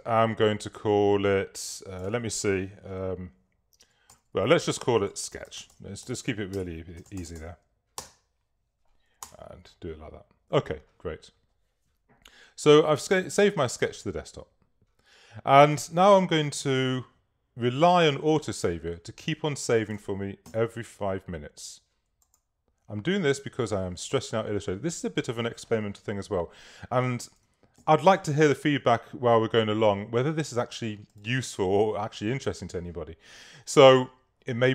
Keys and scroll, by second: 4.2-7.9 typing, 8.0 Return, 9.3 Return, 20.5 5, 28.1 super++.